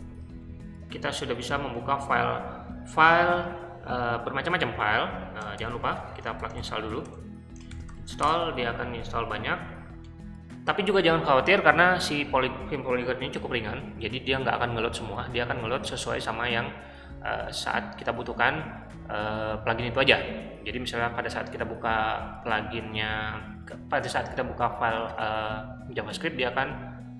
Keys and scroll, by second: 5.5-8.1 typing, 10.0-10.7 typing.